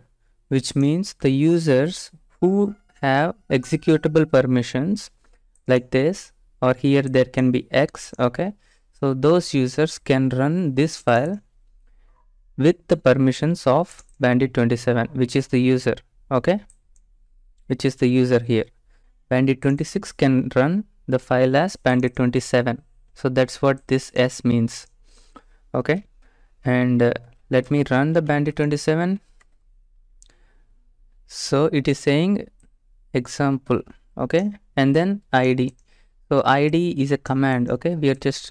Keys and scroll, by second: 28.7 Tab, 28.7 typing, 29.4 Return.